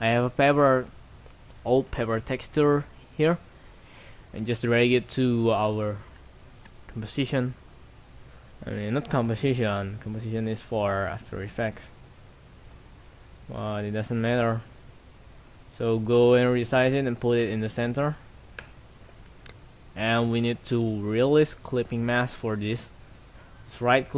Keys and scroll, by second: 7.8 ctrl+t.